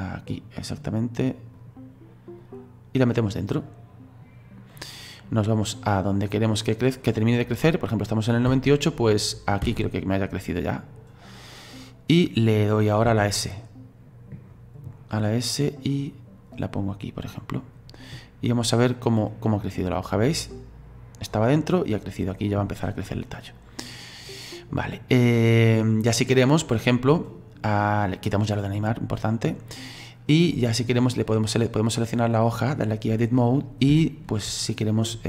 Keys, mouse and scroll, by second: 2.4-8.5 drag, 8.5 space, 9.6 space, 16.5-21.6 drag, 28.6 click, 31.2 click, 32.3-33.5 drag, 33.5-33.9 scroll up 4, 34.0-35.2 shift+middle drag.